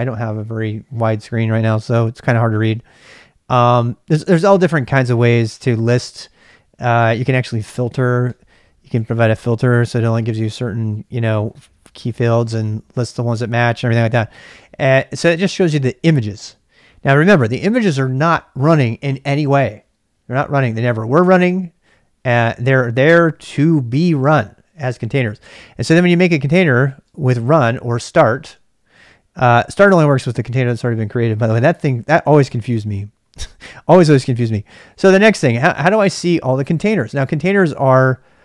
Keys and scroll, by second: 6.8-10.0 typing, 7.4 ctrl+[, 15.3-15.7 typing, 26.5 ctrl+c, 34.7-35.4 typing.